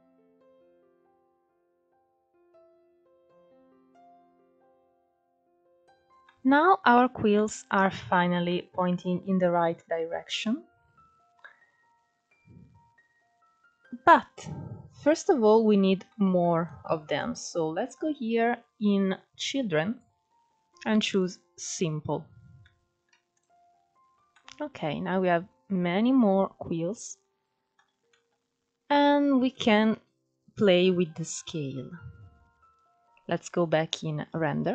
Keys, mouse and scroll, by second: 1.2 scroll up 2, 1.6-2.9 shift+middle drag, 2.9 click, 3.4 middle click, 3.7 scroll up 2, 3.9 Tab, 4.4-4.9 scroll down 1, 4.9-6.0 shift+middle drag, 6.0-6.5 scroll up 2, 6.5-8.5 middle drag, 8.5 scroll down 2, 8.7-11.6 middle drag, 11.6-12.5 middle drag, 12.9 scroll up 1, 13.1 click, 14.8-15.7 shift+middle drag, 15.7-16.4 scroll down 5, 16.4-17.0 scroll down 1, 17.0-18.6 scroll down 3, 18.6-20.0 drag, 21.4-22.0 middle drag, 22.0 click, 22.5-22.8 scroll up 3, 22.8 scroll down 3, 23.0-26.5 middle drag, 26.8 shift+middle click, 27.3-28.1 scroll up 1, 28.1 scroll down 1, 28.3 middle click, 28.9-29.6 scroll up 2, 29.6-30.3 scroll down 1, 30.3-30.8 scroll up 1, 30.8-31.4 scroll up 1, 31.4-34.7 scroll up 4.